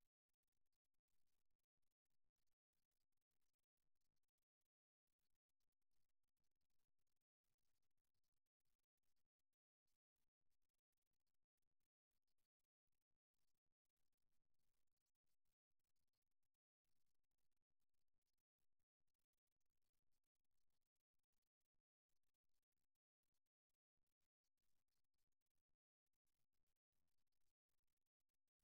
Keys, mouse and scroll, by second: 3.5 middle click, 6.6-9.1 middle drag, 12.4-17.4 middle drag, 18.1-19.6 middle drag, 19.6 ctrl+r, 22.4 g.